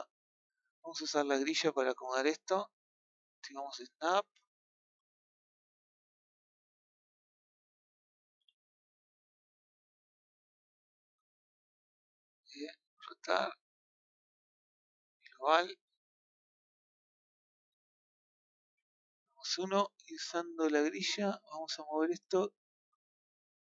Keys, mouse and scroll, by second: 0.0 shift+scroll down 1, 0.1-2.1 shift+middle drag, 2.1 z, 4.4 click, 5.3-6.6 middle drag, 7.1 click, 7.5-8.2 scroll down 1, 8.3 r, 11.9 click, 12.9 click, 15.1-16.6 drag, 18.9 KP_1, 20.1-21.1 scroll up 2, 21.1 click, 22.5 click.